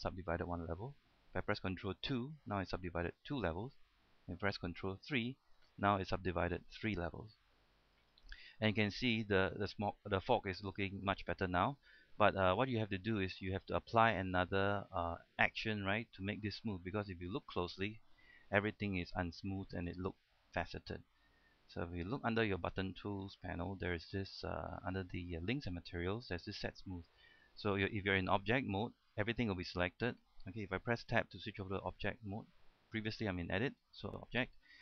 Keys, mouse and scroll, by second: 0.9-1.8 scroll down 1, 2.3 ctrl+2, 2.7-4.3 middle drag, 5.3 ctrl+3, 7.5 middle click, 8.5 scroll up 1, 9.1-10.9 middle drag, 10.9 scroll down 1, 11.1-13.8 middle drag, 13.8-14.8 scroll up 1, 14.8-17.1 middle drag, 17.1 scroll up 1, 18.7 shift+middle click, 22.0 middle click, 27.5-28.4 scroll down 1, 31.2 Tab.